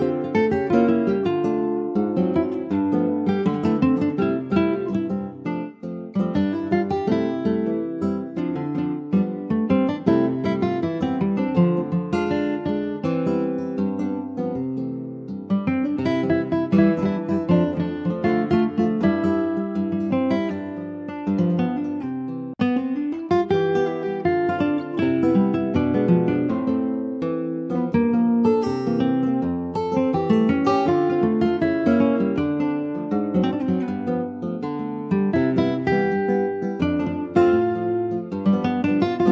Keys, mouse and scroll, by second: 1.2 click, 1.5 scroll down 2, 1.8-3.3 shift+middle drag, 3.3 click, 4.5-5.8 middle drag, 5.8-6.1 scroll up 1, 6.1 click, 7.8 click, 10.2 click, 10.5 scroll down 3, 10.8 middle click, 11.2 click, 12.0 middle click, 12.5 ctrl+j, 12.9 click, 13.1-14.5 middle drag, 14.5 ctrl+s, 14.6 click, 15.0 middle click, 15.5 click, 16.4 /, 17.0 click, 17.3 scroll down 2, 17.5 click, 18.0-20.7 middle drag, 20.7 scroll down 2, 20.9-23.9 middle drag, 23.9-24.2 scroll up 1, 24.2 ctrl+s, 24.3 click, 24.8 shift+click, 25.9 /, 26.4 middle click, 26.9 click, 27.2 shift+middle click, 27.4 shift+scroll up 2, 28.0 ctrl+s, 28.1 click, 28.7 shift+d, 29.6 click, 30.8 middle click, 31.3 ctrl+s, 37.7 click, 38.0 alt+middle click, 38.4 alt+middle click, 38.6 alt+scroll up 1.